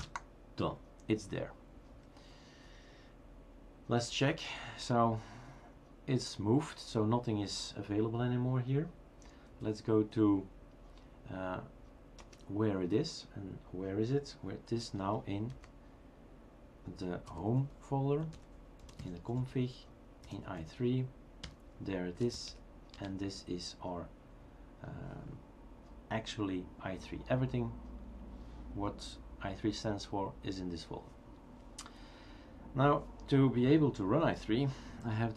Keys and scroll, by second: 0.0 Return, 3.9-4.8 typing, 9.3-10.2 typing, 12.2 space, 15.5 typing, 17.3 typing, 18.6-20.7 typing, 21.4 Return, 22.1-23.4 typing.